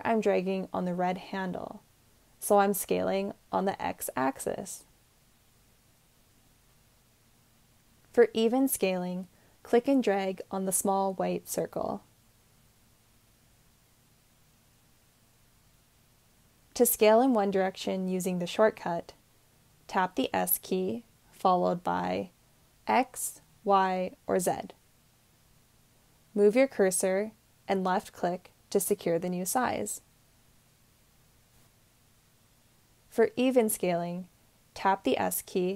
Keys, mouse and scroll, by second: 19.2 s, 20.6 x, 20.6 y, 20.6 z, 30.5-32.8 drag, 35.1 s.